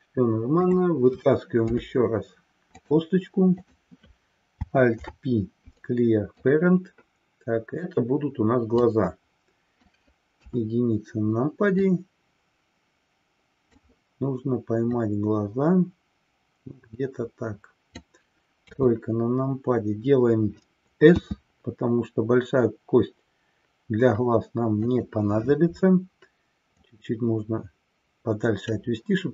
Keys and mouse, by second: 3.6 click, 5.0 alt+p, 8.7-9.8 drag, 10.5 KP_1, 11.8-14.0 drag, 15.0-18.1 drag, 18.7 KP_3, 21.1 s, 26.8-28.8 drag.